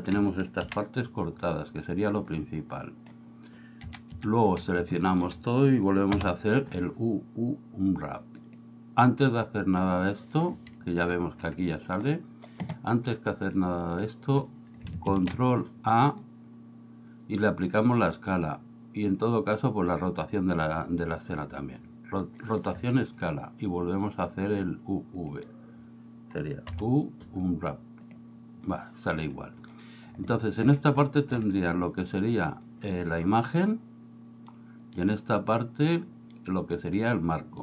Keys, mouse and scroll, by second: 0.7 KP_1, 2.4 click, 3.8 a, 4.2 a, 5.0 middle click, 6.2 u, 13.5-14.1 drag, 15.2 ctrl+a, 24.6-25.4 drag, 26.8 u, 30.5 shift+middle click, 31.2 shift+middle click.